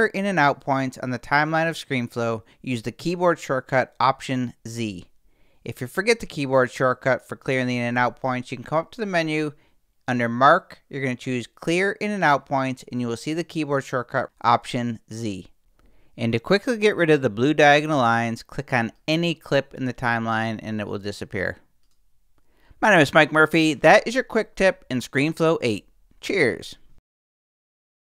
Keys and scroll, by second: 4.7 alt+z, 5.2 alt+shift+z.